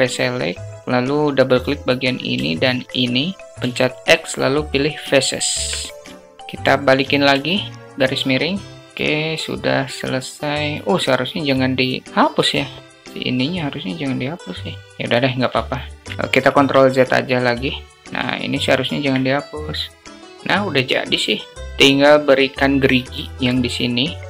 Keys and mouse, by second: 1.3 click, 1.4 click, 1.6 click, 2.4 shift+click, 3.7 x, 5.4 Tab, 6.0 alt+click, 7.2 /, 8.3 alt+z, 8.8 alt+z, 15.6 shift+middle drag, 15.8 shift+click, 16.1 alt+shift+click, 16.2 ctrl+z, 17.6 ctrl+z, 17.9 /, 18.1 alt+click, 23.2 Tab.